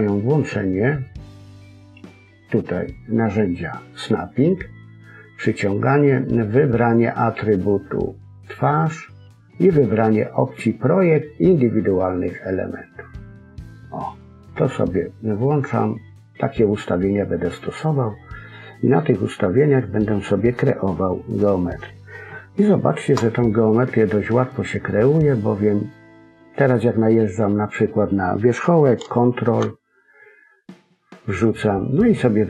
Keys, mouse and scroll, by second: 1.5 click, 6.8 click, 17.8 middle click, 20.1-20.8 scroll up 3, 20.4 middle click, 22.3 shift+middle click, 23.4 middle click, 24.6 scroll up 1, 24.8 middle click, 29.1 ctrl+click.